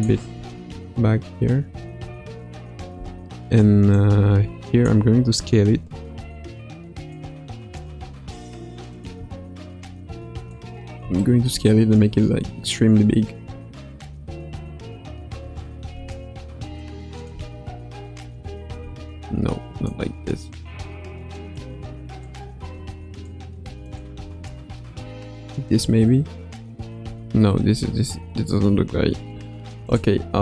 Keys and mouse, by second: 0.3 space, 2.9 space, 3.9 click, 7.0 click, 7.9 r, 9.2 s, 11.4 middle click, 14.1 a, 15.3 i, 16.8-17.3 drag, 17.3 space, 18.7 space, 19.8 click, 22.0 click, 22.9 g, 23.8 click, 24.2 space, 27.0 space, 29.8 click, 30.3 x.